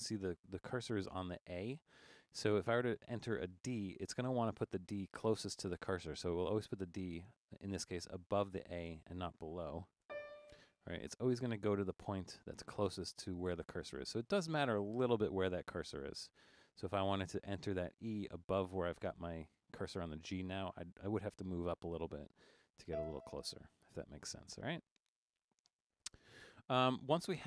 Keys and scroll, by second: 1.4 Down, 1.5 Up, 10.1 d, 14.3 Down, 14.5 Down, 14.9 Down, 15.1 Down, 21.0 Up, 21.2 Up, 21.3 Up, 22.9 e, 27.4 Down.